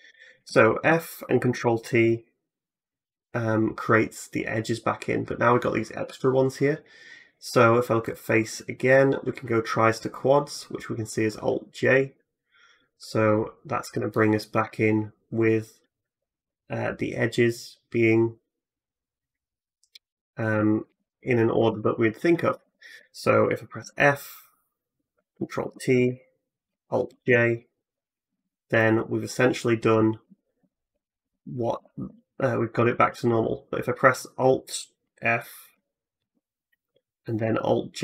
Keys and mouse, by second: 0.3 f, 1.3 ctrl+t, 20.7 ctrl+z, 21.5 ctrl+z, 22.5 ctrl+z, 23.6 f, 25.4 ctrl+t, 26.9 alt+j, 28.1 a, 28.2 a, 30.1 ctrl+z, 30.4 ctrl+z, 30.8 ctrl+z, 31.1 ctrl+z, 31.6 ctrl+z, 34.6-36.0 drag, 36.0 alt+f.